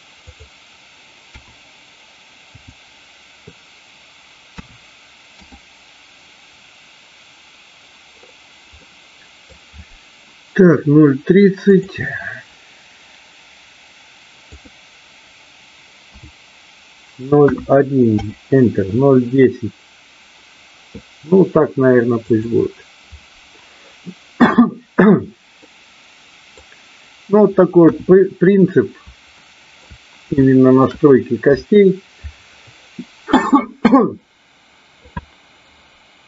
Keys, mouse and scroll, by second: 0.2-6.9 drag, 8.9 middle click, 11.6-20.6 drag, 22.3 click, 25.7 middle click, 27.8 KP_1, 29.3 shift+middle click, 30.4 shift+middle click.